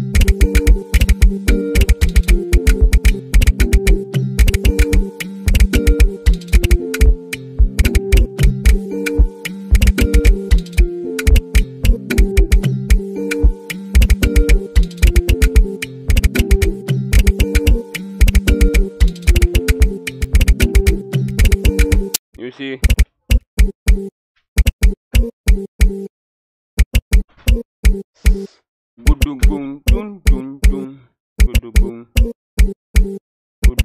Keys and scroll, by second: 0.0-33.8 typing.